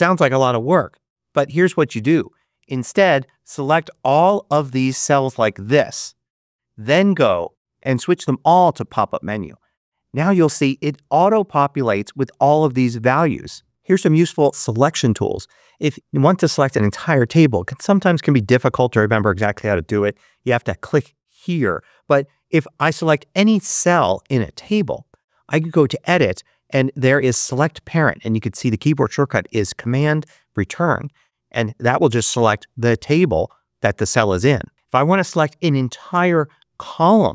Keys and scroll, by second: 1.9 super+z.